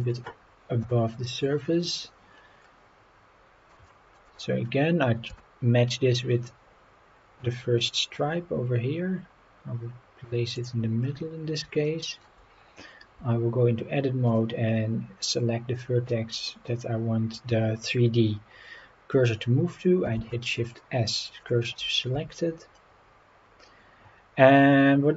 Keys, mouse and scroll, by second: 0.0 click, 0.8 KP_7, 1.6-2.0 scroll down 4, 2.3-2.7 scroll up 4, 3.9 shift+middle drag, 4.3-4.7 scroll up 3, 5.3 g, 10.6 click, 11.0 scroll down 2, 11.9-12.2 shift+middle drag, 12.5-13.0 scroll up 4, 13.2 Tab, 14.3 click, 20.2 shift+s, 22.1 Tab, 22.6 scroll down 3, 23.5 scroll up 2, 24.6 click.